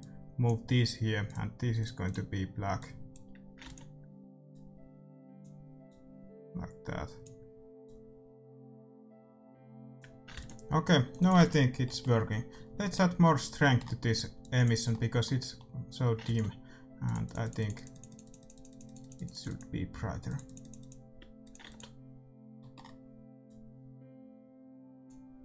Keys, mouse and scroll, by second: 3.6 ctrl+s, 10.3 ctrl+s, 11.2-13.1 drag, 11.3 ctrl+s, 12.7-18.2 middle drag, 14.3-25.4 drag, 16.2 ctrl+s, 21.6 ctrl+s, 23.0-24.8 middle drag.